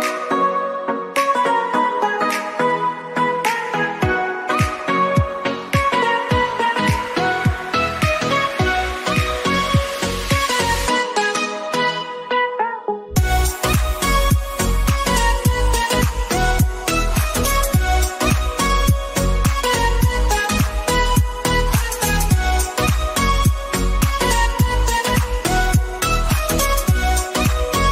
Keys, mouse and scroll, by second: 0.2 ctrl+shift+], 1.1 click, 2.1 shift+click, 3.8 Left, 5.2 shift+Left, 7.5 click, 8.1-10.2 shift+drag, 10.2-12.7 shift+drag, 13.7-14.1 alt+scroll down 1, 14.4 click, 14.9-16.5 shift+drag, 16.5 ctrl+z, 18.4-19.9 drag, 19.9 click, 21.8-26.2 drag, 26.4 click.